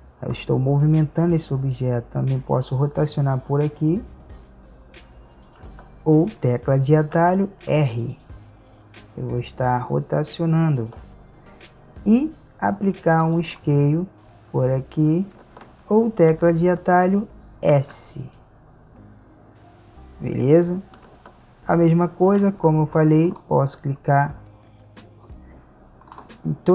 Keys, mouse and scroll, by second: 2.6-4.3 drag, 7.4 r, 13.3 click, 18.1 s, 23.4-26.7 right drag.